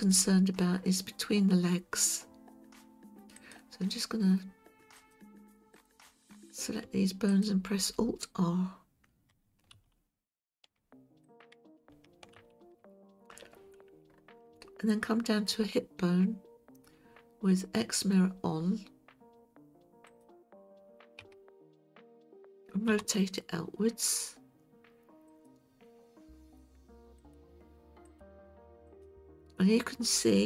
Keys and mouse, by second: 3.4 click, 5.1-5.9 drag, 9.8 alt+r, 11.3 click, 12.4 alt+r, 14.6-15.5 shift+middle drag, 21.2 KP_1, 22.9 r, 24.0 click, 27.2-28.2 drag.